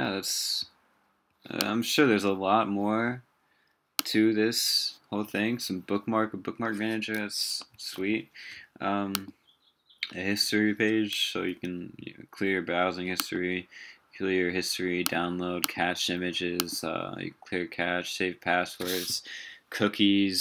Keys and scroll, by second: 7.8 super+w.